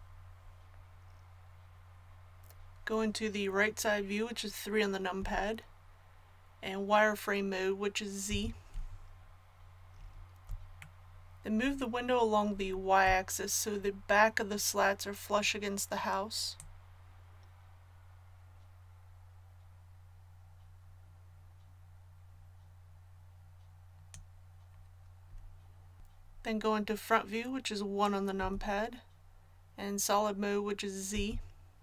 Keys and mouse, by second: 5.1 KP_3, 8.2 z, 16.5-24.0 drag, 28.3 KP_1, 31.1 z.